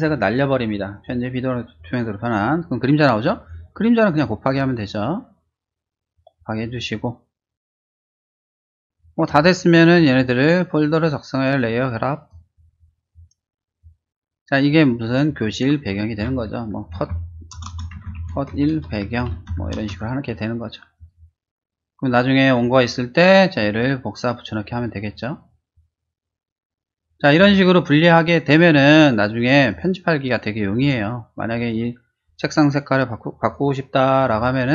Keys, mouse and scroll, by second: 3.4 click, 4.1 click, 6.1 click, 8.9 click, 9.4 shift+click, 9.9 shift+click, 12.2 click, 13.0 click, 13.7 click, 14.7 click, 14.9 click, 16.9-19.6 typing, 19.8 Return, 20.9 click, 29.7 click, 30.7 click, 33.4 click, 34.3 w.